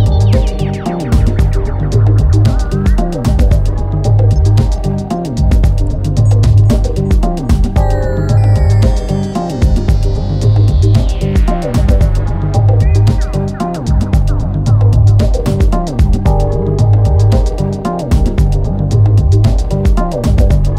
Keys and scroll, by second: 2.6 3, 4.8 4, 8.0 ctrl+d, 8.1 Escape, 10.8 ctrl+d, 10.9 Escape, 17.7 ctrl+d, 17.8 Escape.